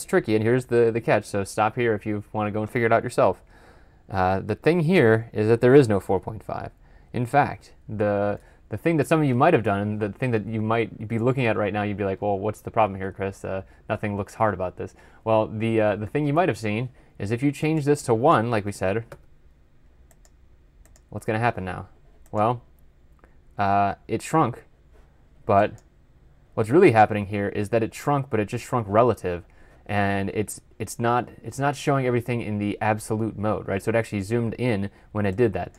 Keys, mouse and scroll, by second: 6.9 Return, 8.2 ctrl+F11, 15.9 ctrl+F12, 17.9 double click, 19.0 typing, 31.8-32.2 scroll down 1, 32.2 scroll up 1.